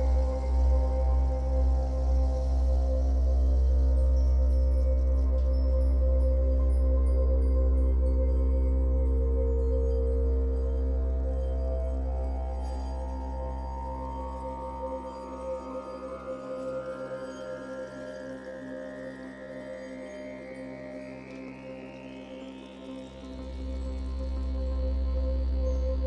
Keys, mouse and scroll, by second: 11.3 f, 11.7-25.4 shift+drag, 17.5 ctrl+z, 25.4-26.0 middle drag.